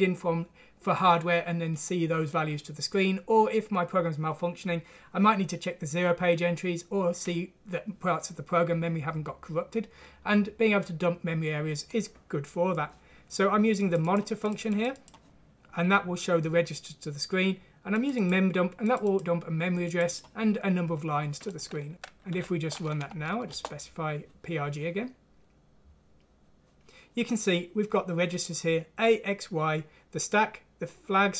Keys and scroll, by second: 21.9 Escape, 22.4 F6, 23.5 shift+Return.